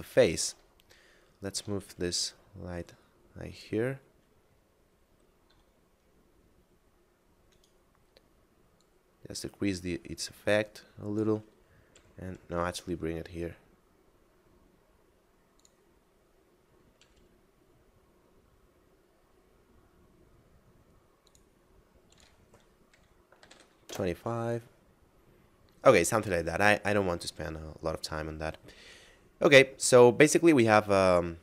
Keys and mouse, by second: 0.8 shift+middle click, 1.8 g, 3.5 click, 5.5 s, 7.5 right click, 8.8 click, 12.0 g, 15.6 click, 17.0 g, 20.9 click, 23.2 2, 23.5 5, 23.8 Return, 25.9 middle click.